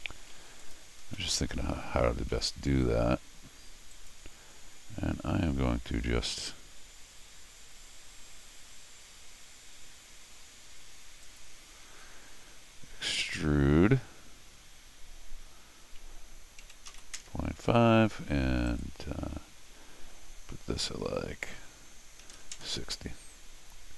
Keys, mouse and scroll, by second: 0.6 click, 1.1-2.3 middle drag, 2.3 c, 3.9 click, 11.2 click, 11.9 x, 18.7 click.